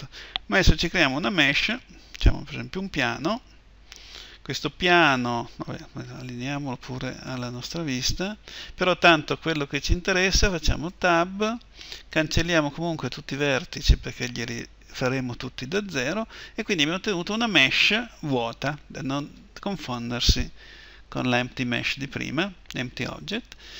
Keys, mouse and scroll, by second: 5.8-7.8 drag, 7.8-10.6 middle drag, 10.6 Tab, 13.1 Delete.